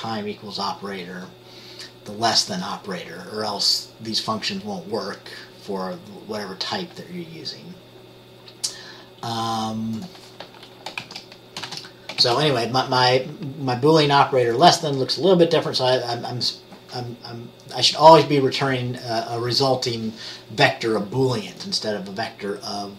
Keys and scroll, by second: 11.2-12.4 typing.